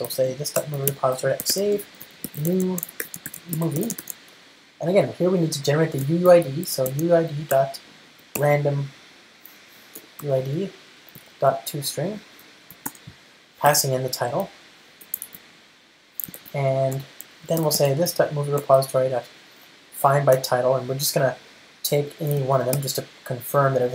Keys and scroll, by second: 3.2 alt+BackSpace, 10.4 Return, 12.5 Return, 16.5 alt+super+l, 18.7 Return, 21.0 Return, 23.1 alt+super+v.